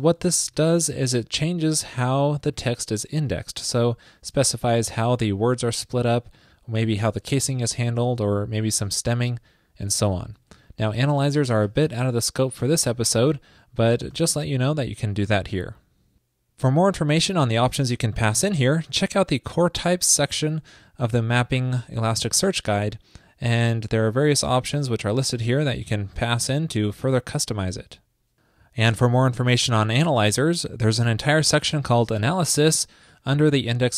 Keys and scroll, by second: 0.1 alt+Left, 0.2 alt+Left, 11.7 shift+super+Right, 15.3 super+s.